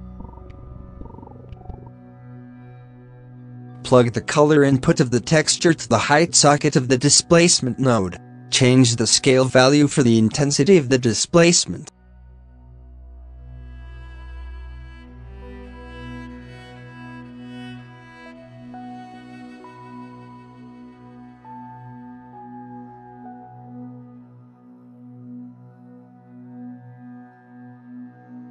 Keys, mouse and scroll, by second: 0.2 alt+a, 0.5 scroll down 8, 0.6 middle click, 0.8-1.2 scroll up 1, 1.2 click, 1.4 g, 2.1-2.4 middle drag, 2.4 alt+a, 2.7 b, 3.6 alt+a, 3.8 middle click, 4.0 scroll up 3, 4.3 click, 4.6 scroll up 6, 5.1-6.5 drag, 6.5-6.9 scroll up 5, 6.9 middle click, 7.2 scroll up 1, 7.6-8.8 drag, 8.8 scroll up 6, 9.9-11.5 drag, 11.5 shift+middle click, 11.7 scroll up 4, 12.4-13.0 scroll down 15, 13.0 middle click, 13.7-14.1 scroll up 5, 14.1 click, 14.8 middle click, 15.0-15.6 scroll up 4, 15.6-16.2 shift+middle drag, 16.2-16.5 scroll up 5, 16.5-16.9 scroll down 10, 16.9 middle click, 17.3-17.7 scroll up 10, 18.1-20.5 drag, 20.5-20.8 scroll down 11, 21.4 shift+middle drag, 21.6-22.3 scroll down 5, 22.3 ctrl+s, 22.4 shift+middle drag, 22.5-23.0 scroll up 2, 23.0 alt+a, 23.4 shift+middle drag, 23.6 scroll up 1, 23.7 click, 24.1 scroll down 6, 24.3 middle click, 24.4 scroll up 2, 24.5 alt+a, 24.8 middle click, 25.0 scroll up 2, 25.1 b, 26.1 middle click, 26.3 scroll up 3, 26.4 shift+a.